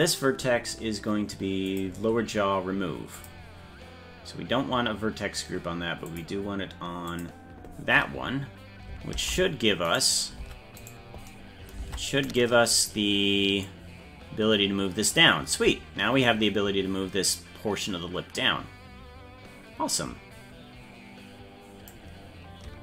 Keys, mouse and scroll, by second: 1.7 click, 3.1 click, 6.1 click, 7.1 click, 9.1 ctrl+Tab, 10.4 Tab, 10.8 right click, 11.8 ctrl+Tab, 12.4 right click, 13.6-21.9 drag.